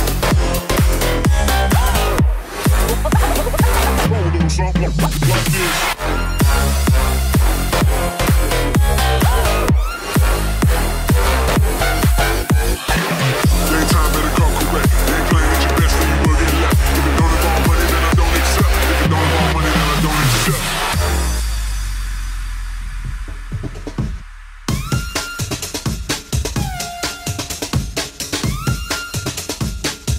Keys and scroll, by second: 8.8-9.8 typing, 11.8-12.7 typing, 19.5-21.9 scroll.